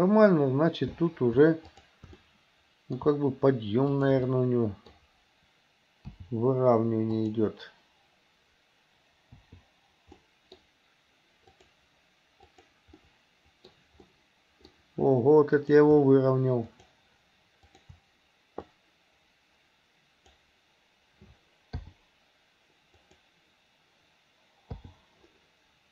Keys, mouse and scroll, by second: 2.2 middle click, 4.0 shift+click, 4.3 middle click, 6.1 g, 9.4 i, 10.3 middle click, 11.5 click, 12.5 click, 13.0 middle click, 14.1 middle click, 15.6 click, 16.7 shift+click, 17.7 shift+click, 18.9-20.4 drag, 21.9 i, 23.0 click, 24.8 i.